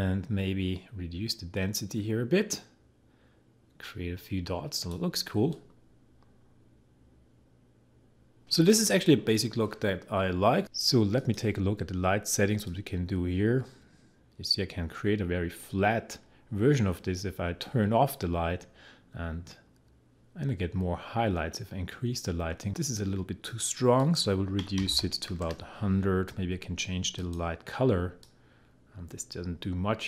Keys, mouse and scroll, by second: 24.4-25.4 typing, 27.2-30.0 drag.